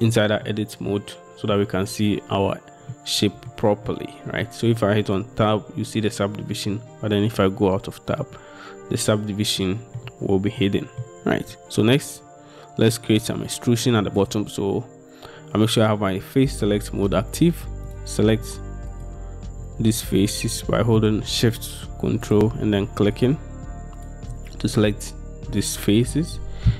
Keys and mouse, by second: 0.6-1.6 middle drag, 3.1 middle click, 4.0 middle click, 5.5 Tab, 9.7 shift+middle click, 10.7 middle click, 23.2 ctrl+shift+click, 24.1 ctrl+shift+click.